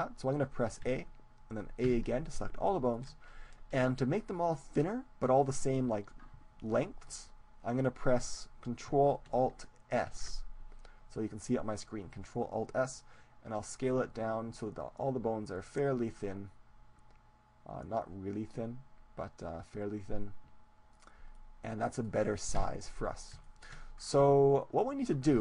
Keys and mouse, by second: 1.0 a, 1.8 middle click, 2.0 a, 2.2 middle click, 2.7-9.0 middle drag, 10.0 ctrl+alt+s, 21.4-22.8 drag, 22.6 KP_1, 22.8-25.4 middle drag, 24.9-25.4 right drag.